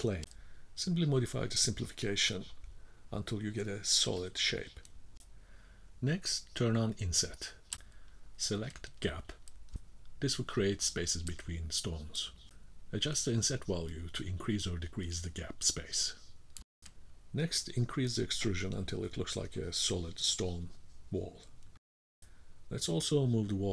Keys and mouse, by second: 2.3 click, 2.8 middle click, 4.8-10.9 drag, 10.9 middle click, 11.5 middle click, 12.5 middle click, 13.2-14.2 middle drag, 16.4 middle click, 18.0-20.3 drag, 20.4 middle click, 22.3-23.0 drag.